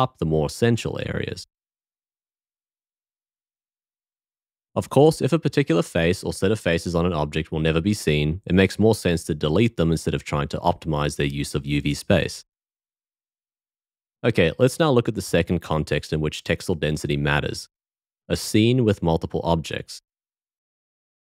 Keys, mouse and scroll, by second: 2.7 s, 10.1 l, 19.7 shift+middle click, 21.0 shift+middle click.